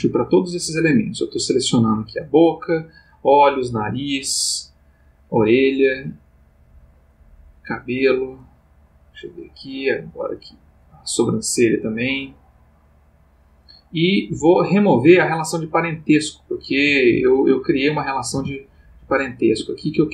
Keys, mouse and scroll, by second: 0.7 click, 2.6 click, 4.2 click, 5.6 click, 7.1 click, 8.4 click, 9.7 click, 10.3 click, 12.2 click, 16.2 click, 16.7 g, 17.3 Escape, 17.7 click, 18.3 g, 19.4 Escape.